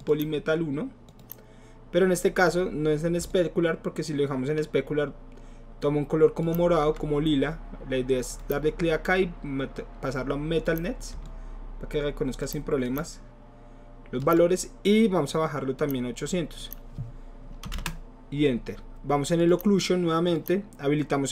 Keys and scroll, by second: 17.7 BackSpace, 17.9 Return.